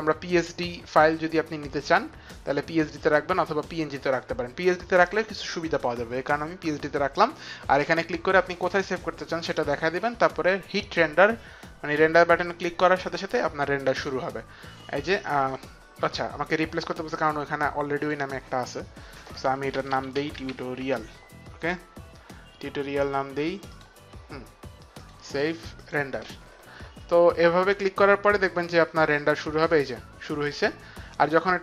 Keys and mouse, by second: 5.1 click, 9.4 click, 12.1 click, 14.1 click, 18.2 click, 19.5-20.5 typing, 23.6-24.4 typing, 23.9 click, 25.2 click, 26.0 click.